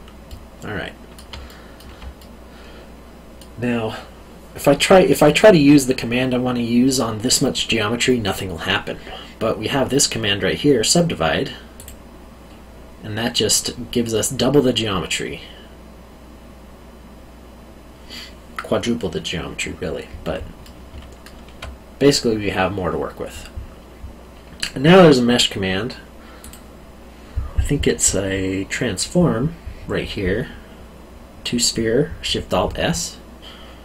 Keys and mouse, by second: 0.2 middle click, 1.4 alt+middle click, 2.2 middle click, 11.7 click, 14.1 middle click, 20.6 middle click, 20.9 alt+middle click, 26.4 click.